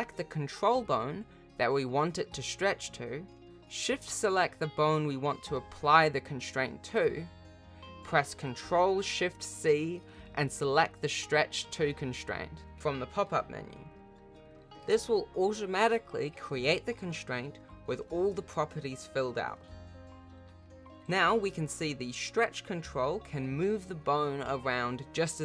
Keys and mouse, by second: 1.6 click, 3.9 shift+click, 11.9 click, 13.3 g, 15.6 click, 16.4 r, 17.8 click, 18.2 click, 20.6 click, 20.9 g.